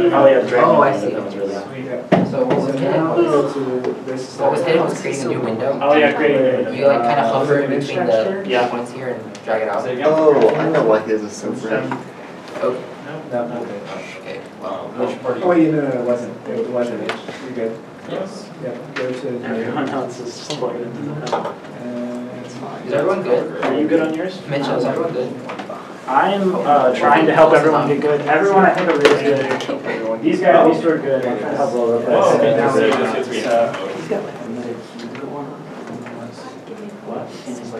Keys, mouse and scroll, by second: 13.1 scroll, 13.5 ctrl+z, 14.2 shift+z, 14.3 ctrl+s, 19.6 z, 20.3 z, 21.8 n, 22.0 t, 22.6 shift+middle click, 22.8 scroll up 1, 26.3 scroll up 1, 26.3-26.9 scroll, 27.9 shift+middle click, 28.4 scroll up 1, 31.0 shift+middle click, 36.4 shift+middle click, 36.6 shift+middle click, 37.0 Tab, 37.4 a.